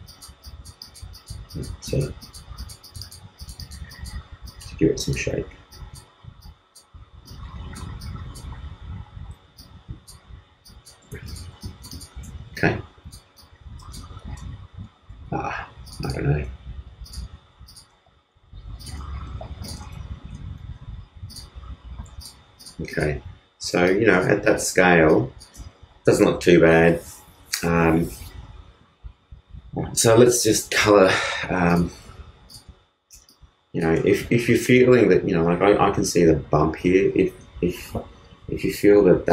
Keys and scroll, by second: 9.1 super+z, 19.8 shift+space, 20.5 shift+super+space, 20.6 super+z.